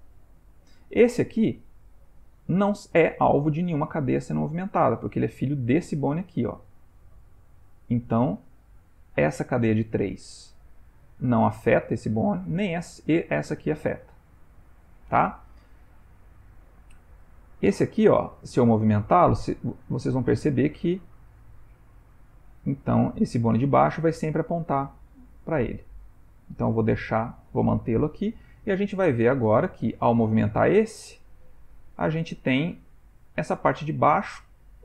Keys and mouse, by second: 0.9 click, 12.0 click, 12.6 click, 13.7 click, 17.2 g, 28.6 ctrl+middle click, 29.9 click, 30.5 g.